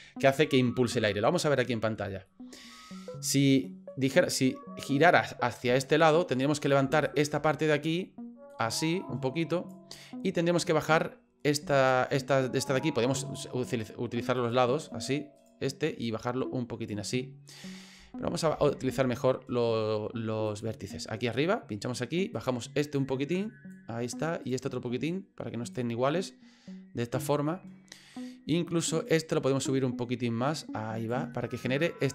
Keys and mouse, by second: 2.3 middle click, 3.6 middle click, 6.3 middle click, 7.1 shift+right click, 7.4 middle click, 8.5-9.7 drag, 9.9 middle click, 10.7 middle click, 11.8 shift+right click, 14.4 click, 15.4 right click, 16.1 click, 17.1 middle click, 18.6 ctrl+z, 20.5 click, 22.3 right click, 23.0 click, 24.4 right click, 25.1 click, 26.1-27.2 middle drag, 27.6 middle click, 28.9 right click, 29.7-31.1 drag, 31.3-32.1 middle drag.